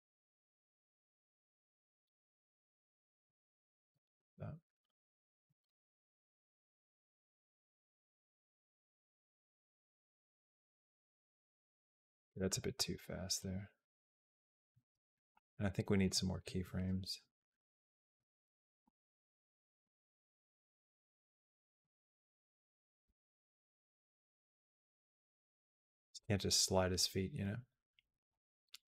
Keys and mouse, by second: 3.0 x, 3.6-5.6 drag, 5.4 space, 11.8 space, 12.0 middle click, 13.2-14.5 drag, 14.9 click, 15.1 g, 16.3-18.0 drag, 18.5 click, 18.7 g, 19.6 g, 20.9 g, 21.6 a, 22.6 click, 22.8 g, 24.0-28.8 drag.